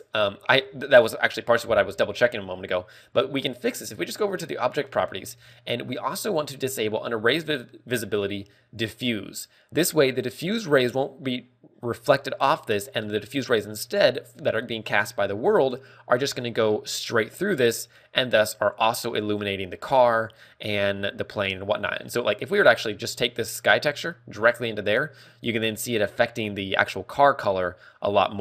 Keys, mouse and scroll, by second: 12.0 scroll down 2, 19.1 scroll down 4, 20.3 scroll up 3, 22.0 scroll down 2, 22.3 middle click, 22.3 scroll down 2, 23.5 click.